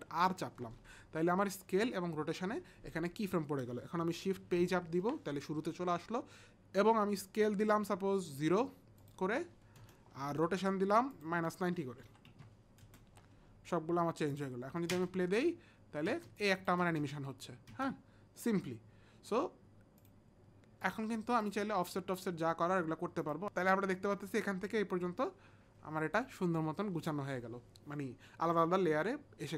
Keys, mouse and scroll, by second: 0.1 alt+shift+r, 5.0 shift+Page_Up, 9.0 click, 9.8 KP_0, 11.1 click, 12.0 KP_Subtract, 12.4 KP_Subtract, 12.4 click, 12.4 KP_0, 12.4 KP_9, 12.9 Return, 14.4 Return, 14.4 KP_Subtract, 14.4 click, 14.4 KP_0, 14.4 KP_9, 14.9 space, 16.0 space, 16.4 click, 16.8 space, 17.7 space, 20.0 click, 20.8 click, 21.4 click, 22.2 click, 23.4 click.